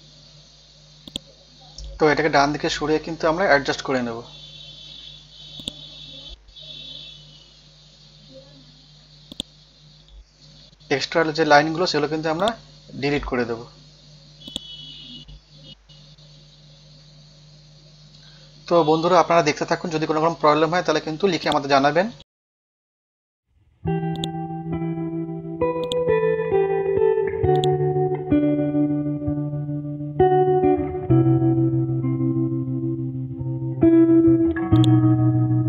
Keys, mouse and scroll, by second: 1.0 alt+click, 1.9 alt+Left, 2.4 alt+Left, 5.6 click, 7.1 scroll down 1, 8.1 scroll up 1, 9.3-11.0 drag, 11.0 Delete, 12.4-15.3 drag, 13.5 Delete, 15.3 BackSpace, 17.6 Right, 17.9 Right, 18.5 Return, 18.9 Down, 19.3 BackSpace, 21.4 click, 22.5 ctrl+a, 24.1 click, 28.1 scroll down 1, 29.0 scroll up 1, 29.2 typing, 31.7 Down, 32.1 Down, 33.1 Down, 34.7 click, 35.1 scroll down 1.